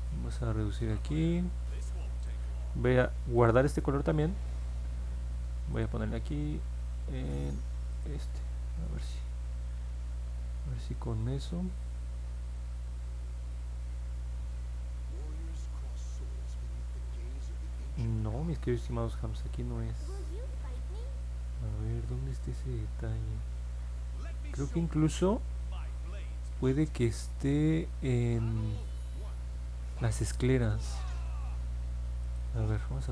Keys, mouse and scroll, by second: 0.0 click, 2.1 click, 3.3 click, 5.7 click, 7.9 click, 11.8 click, 15.1-18.6 drag, 19.9-22.1 alt+drag, 22.5-24.8 alt+drag, 31.0 middle click, 32.2 click.